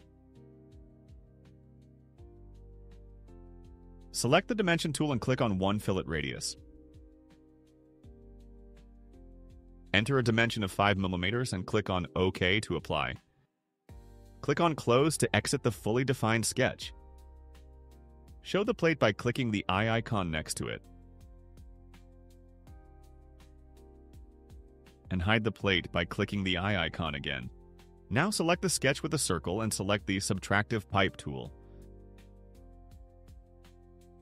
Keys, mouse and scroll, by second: 2.2 click, 6.4 click, 7.5 click, 9.4 click, 11.1 5, 12.0 Return, 15.6 click, 17.1 middle click, 17.6 middle click, 20.7 click, 21.7 click, 24.8-25.8 right drag, 27.0 click, 28.1 click, 34.0 click.